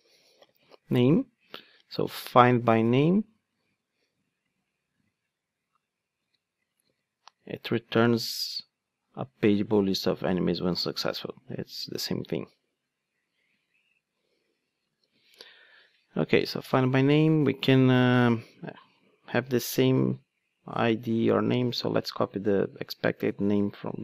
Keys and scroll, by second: 1.6 super+c, 2.5 super+v, 3.3 super+z, 6.2 super+c, 6.9 super+v, 11.1 super+c, 14.9 super+v, 22.1 super+c.